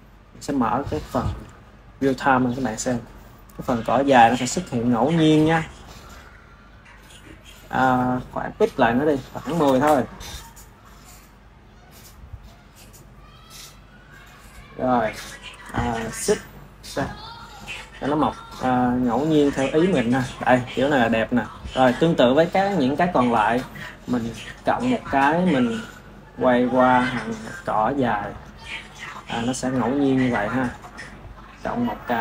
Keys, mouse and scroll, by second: 0.9-1.6 drag, 5.6 click, 6.6 click, 7.4 click, 8.8-11.0 drag, 17.0 click, 21.9 click, 24.6 click, 28.1 click, 29.3-30.3 shift+middle drag, 30.3 click, 31.6 click.